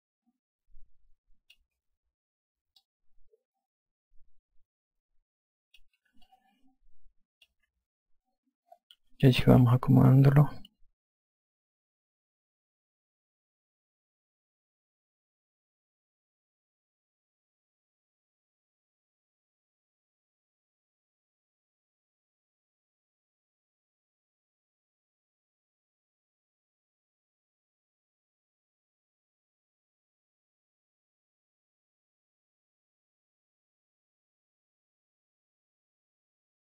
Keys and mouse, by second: 3.2 click, 6.6 alt+click, 9.8 3, 11.9 e, 13.2 click, 14.5 click, 18.4 alt+click, 20.3 r, 27.5 e, 28.9 click, 31.3 click, 36.0 alt+click.